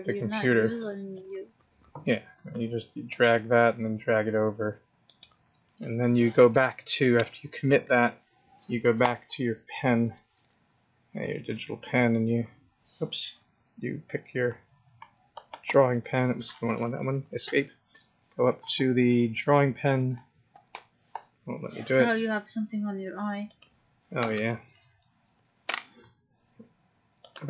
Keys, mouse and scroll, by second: 1.1 click, 11.1 click, 18.6 click, 27.2 click.